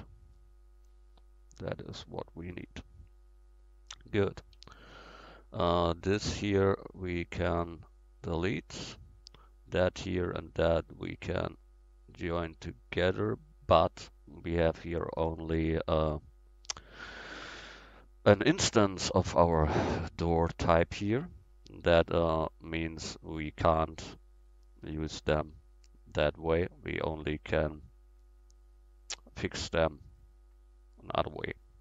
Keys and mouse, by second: 4.1-6.9 right drag, 4.6 x, 7.4 x, 10.9-13.9 middle drag, 14.4-16.0 middle drag, 16.0-19.5 right drag, 20.6 middle drag, 21.3 middle click, 21.5-22.5 middle drag, 25.5 shift+d, 26.6-28.7 drag.